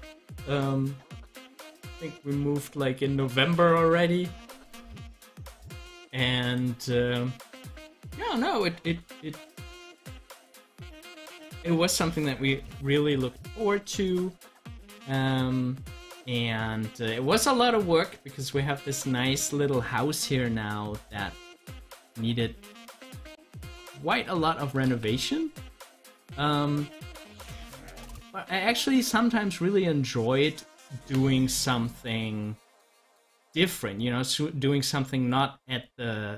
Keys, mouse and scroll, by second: 5.4 click, 10.0 scroll up 1, 21.2-22.9 drag, 22.9 ctrl+z, 24.9 ctrl+z, 35.9-36.3 drag.